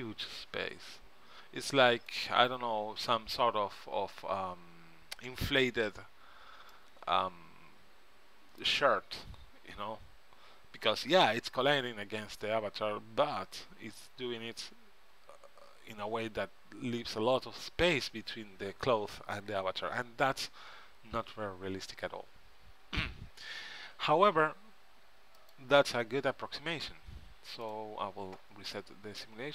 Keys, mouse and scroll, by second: 3.7-6.2 middle drag, 8.4-9.6 middle drag, 10.4-20.4 middle drag, 26.0-29.4 drag, 28.8 middle click.